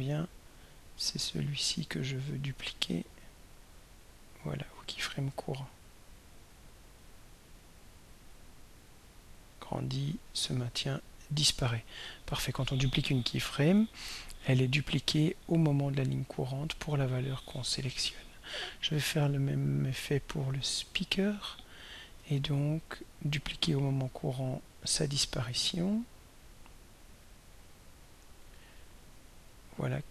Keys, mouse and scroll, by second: 2.0 right click, 3.3 click, 5.1 right click, 7.3 drag, 8.4-14.0 drag, 21.0 click, 26.1 right click, 28.1 click.